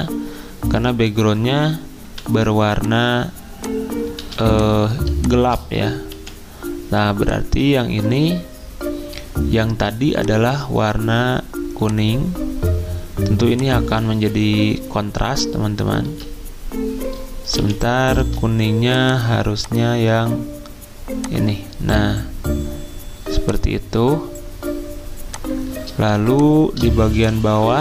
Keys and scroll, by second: 2.0 v, 4.2 z, 6.1 t, 16.0 ctrl+z, 17.6 t, 18.2 ctrl+z, 27.0-27.8 typing.